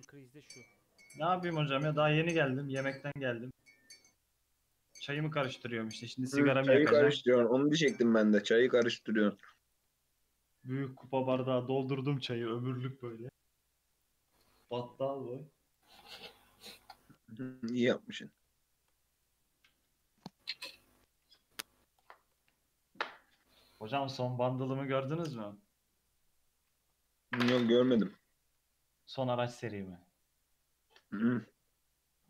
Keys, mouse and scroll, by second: 2.6-4.1 scroll down 1, 4.1 click, 5.3 shift+e, 8.6 click, 9.4 click, 10.2 shift+click, 11.2 shift+e, 14.4 Tab, 14.7 alt+z, 15.0-15.7 scroll down 2, 15.7-16.4 right drag, 16.4-16.8 scroll down 4, 16.8-17.9 middle drag, 17.9-18.3 scroll up 2, 18.4-19.2 middle drag, 19.2-20.6 right drag, 20.6-21.2 shift+middle drag, 21.2 ctrl+a, 22.4 Tab, 23.3 e, 24.6 ctrl+z, 25.4 a, 26.0-26.7 middle drag, 26.7 ctrl+z, 27.8 3, 28.6 a, 29.2 middle click, 29.7 alt+e.